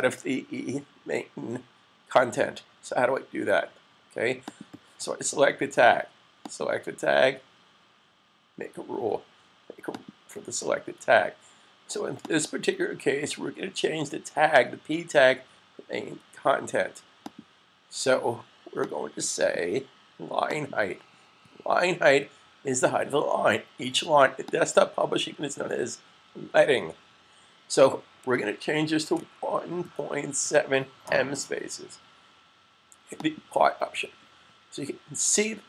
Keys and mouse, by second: 4.4 click, 9.8 click, 17.1 click, 24.4 click, 29.0-29.7 typing, 30.9-31.6 typing, 33.0 click.